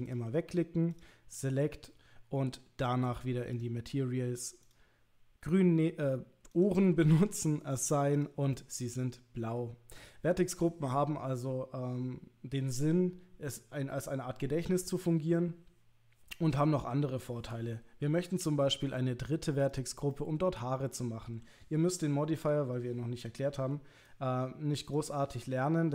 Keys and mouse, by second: 0.1 click, 1.9 middle click, 4.6 click, 6.5 click, 7.6 click, 8.6-9.6 middle drag, 20.1 middle click, 22.4 3, 23.6 c, 25.4 middle click.